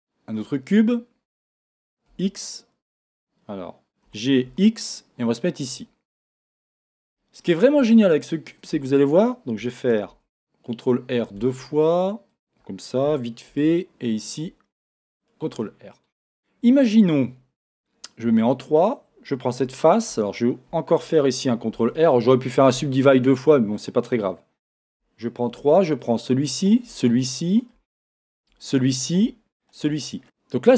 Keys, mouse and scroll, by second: 0.7-1.5 scroll down 1, 5.6 click, 6.2-12.4 shift+middle drag, 6.8-7.2 scroll up 1, 8.3-8.7 scroll down 1, 8.7 Tab, 10.1 ctrl+r, 12.4 click, 13.5 ctrl+r, 15.3 click, 15.6-18.6 middle drag, 18.2 3, 18.6 click, 21.7 ctrl+r, 23.2 click, 24.9 3, 26.0 shift+click, 26.7 shift+click, 27.1-28.3 middle drag, 28.3 shift+click, 28.7 middle click, 29.6 shift+click, 30.1 scroll down 1, 30.2-30.7 middle drag.